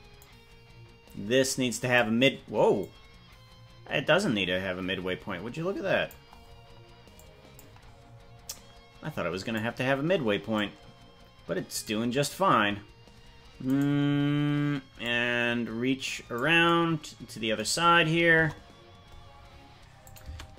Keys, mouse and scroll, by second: 0.1-1.9 drag, 2.8-6.1 drag, 7.1 click, 8.4-9.5 drag, 10.5-11.8 drag, 13.7 right click, 15.0-16.3 drag, 18.4 KP_0, 20.0 click, 20.2 space.